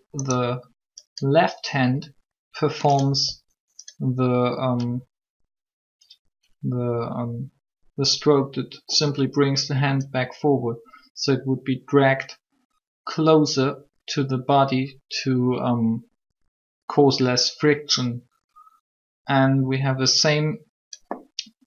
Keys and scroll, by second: 3.1 r.